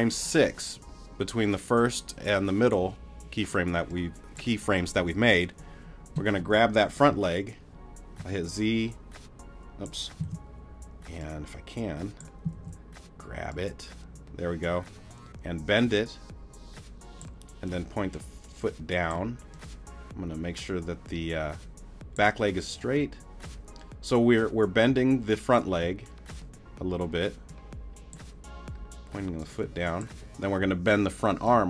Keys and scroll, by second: 6.4 z, 9.2 z, 10.2 super+z, 12.5 super+z.